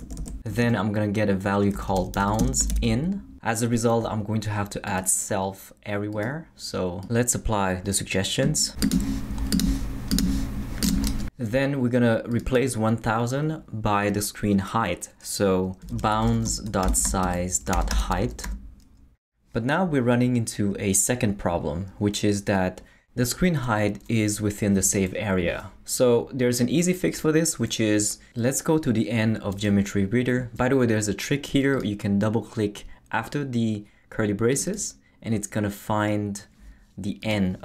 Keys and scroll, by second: 0.0 Right, 0.5-3.2 typing, 15.6-18.9 typing.